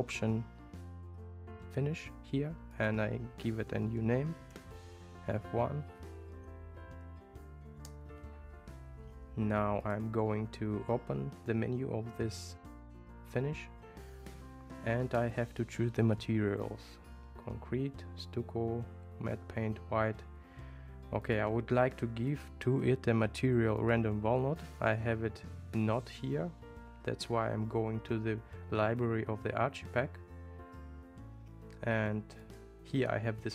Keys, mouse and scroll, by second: 2.8-8.9 drag, 9.9 click, 16.1-21.4 drag, 22.3-23.9 drag, 32.4 click.